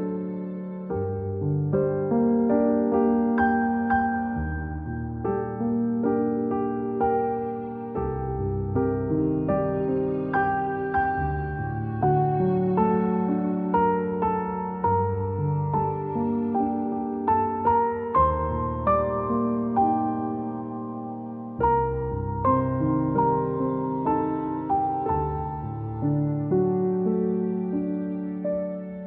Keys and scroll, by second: 0.6-1.3 typing, 6.1 c, 20.5 v, 23.9 =, 27.1 -.